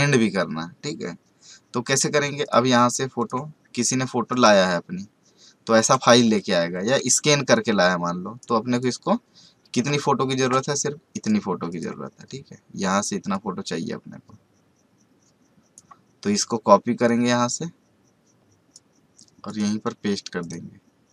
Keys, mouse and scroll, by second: 2.4 click, 7.1 space, 7.5 ctrl+click, 11.1 right click, 11.7-21.1 drag.